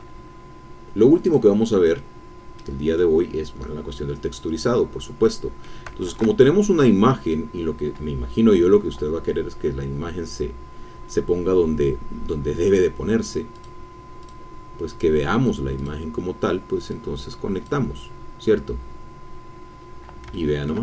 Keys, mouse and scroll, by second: 1.5 click, 2.6 middle click, 2.7 scroll down 1, 3.2-3.8 scroll up 2, 5.2 middle click, 6.0 shift+a, 13.5 click, 14.2 click, 14.9-16.0 drag, 16.9 click, 19.4-20.3 scroll up 1, 20.3 shift+click, 20.5-20.8 shift+middle drag.